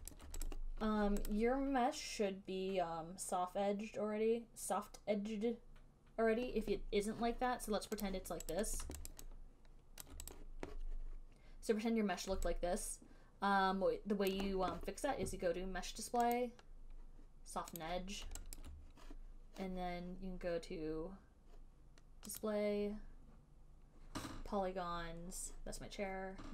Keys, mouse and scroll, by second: 0.4 alt+right click, 0.7 click, 1.5 click, 1.7 alt+click, 2.6 alt+scroll, 8.4 click, 8.8 click, 9.4 alt+right click, 10.3 alt+click, 10.5 alt+click, 10.7 click, 14.6 alt+click, 16.7 click, 18.1 click, 18.8 alt+click, 19.2 alt+right click, 22.7 click, 24.8 click.